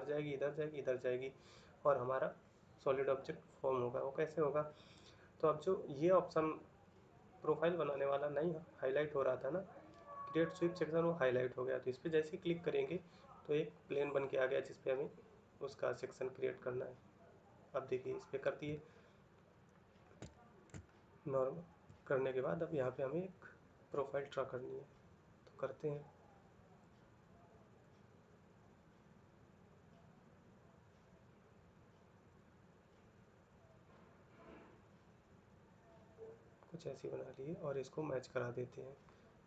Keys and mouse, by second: 19.0 ctrl+middle click, 20.1 shift+middle click, 20.6 ctrl+middle click.